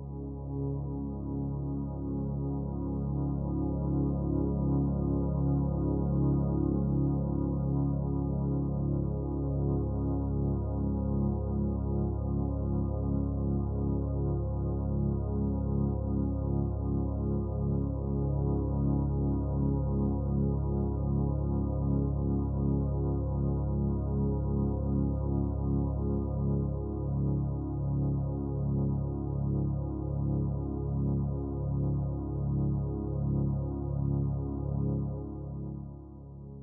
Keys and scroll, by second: 32.6 ctrl+z.